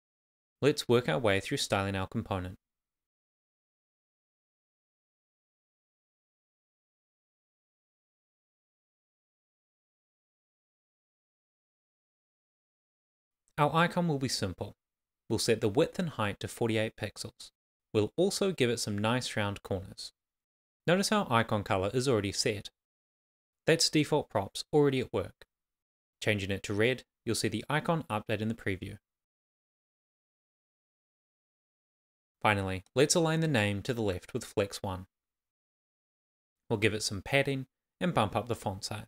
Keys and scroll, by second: 4.1 Return, 4.7 shift+;, 4.9 Return, 5.2 shift+;, 5.3 shift+space, 5.7 shift+5, 5.7 Right, 6.1 Return, 6.7-10.3 typing, 7.1 Return, 7.7 Right, 8.0 Return, 9.3 Return, 11.1 super+s, 14.1 alt+Up, 15.7 shift+;, 16.8 shift+;, 19.3 shift+r, 20.0 shift+;, 20.3 super+s, 23.0 super+s, 24.7 super+z, 25.1 super+s, 32.7-35.2 typing, 35.6 super+s.